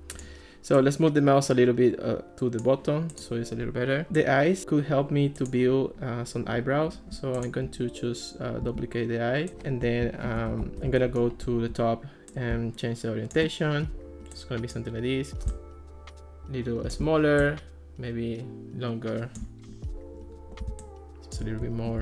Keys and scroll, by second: 8.7 super+d, 10.3 alt+r.